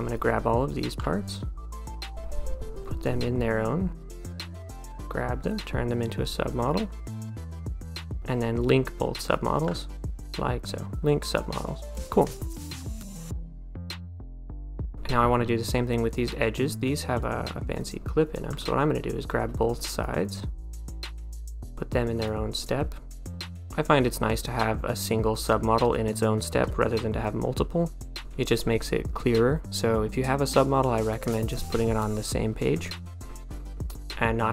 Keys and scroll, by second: 4.2 d, 13.6-14.5 typing, 26.9 1.